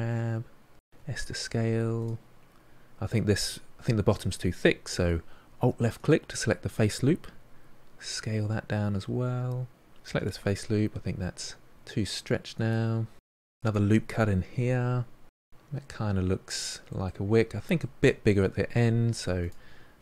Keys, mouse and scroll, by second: 0.2 g, 2.3 s, 6.1 alt+click, 7.2 s, 9.9 alt+click, 10.6 alt+click, 11.2 g, 13.3 ctrl+r, 13.9 g, 14.6 scroll down 5, 14.8 middle click, 15.0 Tab, 15.2-17.2 middle drag, 17.2-17.7 scroll up 6, 17.7-18.3 shift+middle drag, 18.3 Tab, 19.5 alt+click.